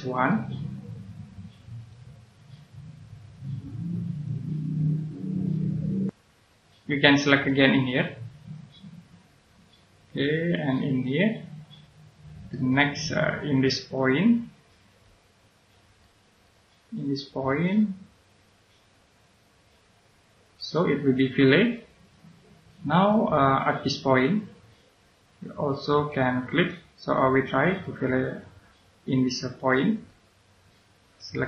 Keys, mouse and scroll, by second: 0.6-1.5 scroll up 1, 1.7 click, 5.2-6.0 scroll down 1, 6.0 middle click, 7.1-8.3 scroll up 1, 8.3 click, 12.0 scroll down 1, 12.5 middle click, 13.0-13.5 scroll up 1, 14.8 click, 16.0 middle click, 17.4 click, 20.3 scroll down 1, 22.0 right click, 23.7-26.0 scroll up 1, 26.5 click, 30.0 right click.